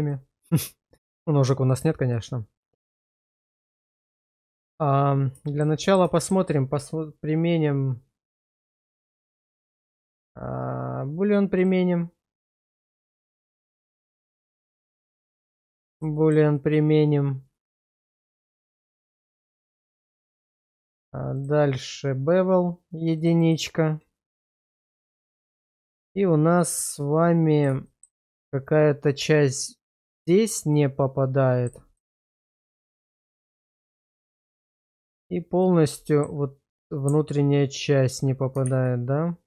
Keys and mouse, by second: 0.1-1.4 middle drag, 1.7 shift+middle click, 2.1-3.4 middle drag, 3.6 shift+middle drag, 4.2 middle click, 5.4 shift+middle click, 5.8 middle drag, 6.1 shift+middle click, 9.1 click, 9.7 click, 11.6-12.5 drag, 13.2 shift+middle drag, 13.8-14.1 middle drag, 14.3 shift+middle drag, 15.1-15.9 middle drag, 16.1 shift+middle drag, 16.5-18.5 middle drag, 18.7 shift+middle drag, 21.3 click, 23.2 click, 23.4 click, 26.1-27.6 middle drag, 27.8 shift+middle drag, 29.6-30.0 middle drag, 30.7-31.6 middle drag, 31.9 shift+middle drag, 33.6-34.9 middle drag, 35.6 middle drag, 36.1 shift+middle drag, 36.9-38.1 alt+middle drag, 38.7 shift+z.